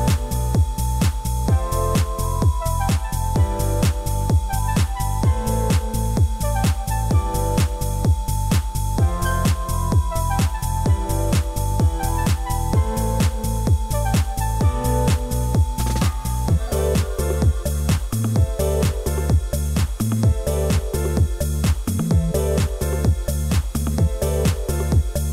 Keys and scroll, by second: 14.0 ctrl+z, 20.4 ctrl+t.